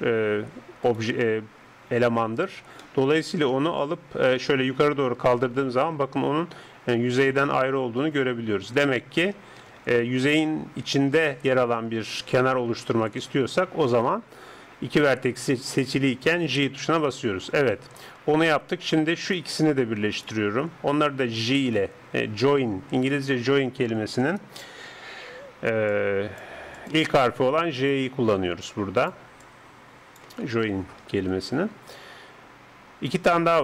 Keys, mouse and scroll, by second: 0.9 right click, 2.8-7.5 middle drag, 4.3 g, 9.7 ctrl+z, 11.2 ctrl+z, 12.2 ctrl+z, 12.9 ctrl+z, 13.9 KP_7, 16.5 j, 19.3-21.9 right drag, 21.5 j, 25.9-31.3 drag, 25.9-30.4 d, 31.3 d, 31.5 right click, 33.1 d.